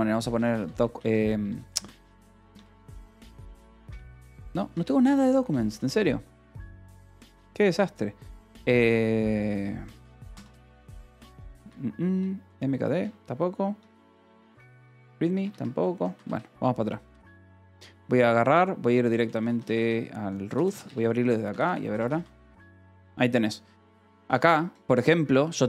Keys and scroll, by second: 0.0-4.7 typing, 10.0-14.3 typing, 15.2 Escape, 16.1 q, 16.2 Return, 17.0 n, 18.5-23.4 typing, 24.2 Return, 24.9 j.